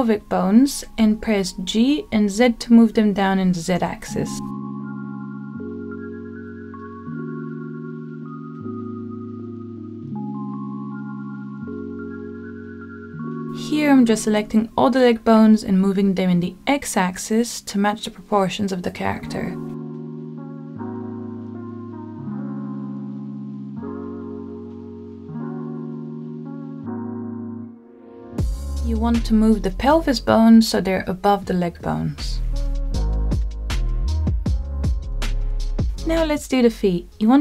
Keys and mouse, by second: 2.5 g, 3.3 z, 5.5 click, 6.1 middle click, 7.1 click, 8.6 g, 9.2 z, 11.7 click, 13.9-15.1 drag, 17.2 g, 18.4 x, 22.4 click, 23.1 KP_1, 24.5 shift+middle click, 25.5 g, 26.0 x, 29.0 click, 31.1 g, 34.4 click, 35.0 middle click, 36.5 middle click, 37.3 g.